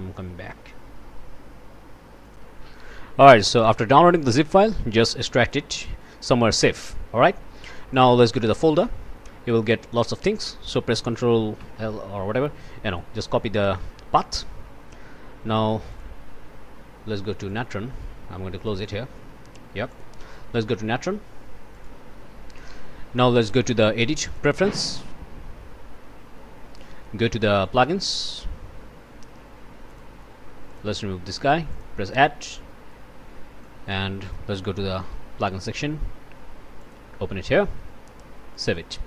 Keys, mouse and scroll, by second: 2.2 click, 3.3 click, 4.6 right click, 5.4 click, 6.2 click, 8.0 click, 10.1 click, 11.6 ctrl+l, 11.8 ctrl+c, 12.5 Escape, 12.9 click, 15.9 click, 17.5 click, 18.6 click, 19.9 click, 21.7 click, 23.4 click, 24.3 click, 27.6 click, 29.9 click, 30.7 click, 31.7 click, 33.6 click, 34.9 ctrl+v, 36.8 click, 38.5 click.